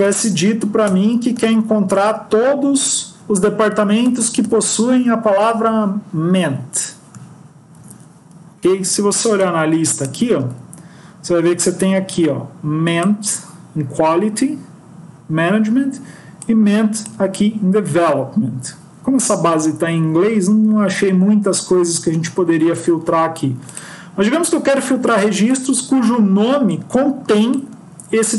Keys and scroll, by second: 1.3 Left, 1.4 Left, 5.3 BackSpace, 7.7 ctrl+s.